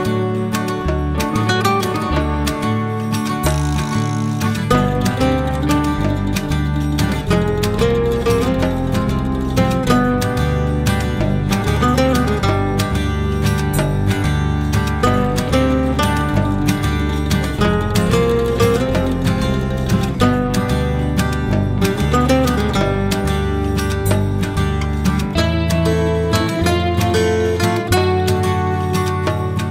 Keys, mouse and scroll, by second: 0.5 shift+a, 7.0-10.1 drag, 11.0 click, 12.1 Tab, 13.6 g, 21.2-22.2 middle drag, 22.2 Tab, 24.8 shift+a, 29.0 click.